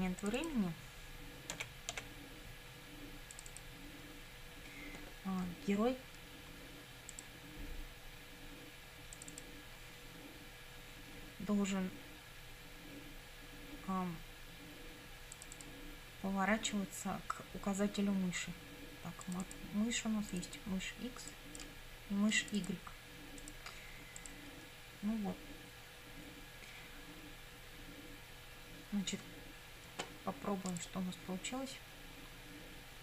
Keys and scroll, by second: 1.6 e, 2.0 v.